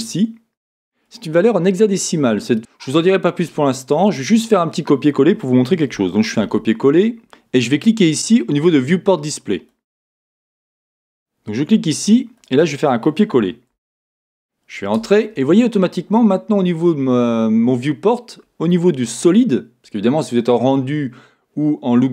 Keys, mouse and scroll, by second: 10.2 click, 10.9 click, 16.5 middle click, 20.6-22.1 middle drag.